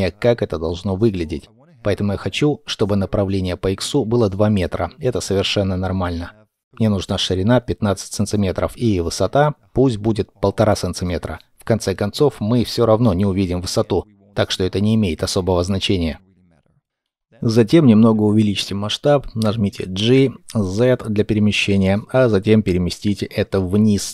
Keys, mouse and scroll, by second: 2.0 middle click, 7.2 KP_1, 7.6 KP_5, 8.3 Return, 10.8 Return, 12.7-13.8 scroll up 1, 13.8 middle click, 15.1 scroll down 1, 16.0 middle click, 17.6-19.2 scroll up 1, 19.9 z.